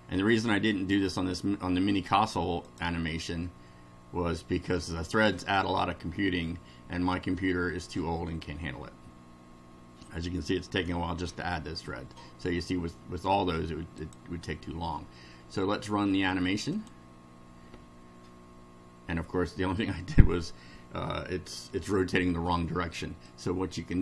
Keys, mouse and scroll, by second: 2.7 click, 14.0 click, 16.7 click, 23.2 click.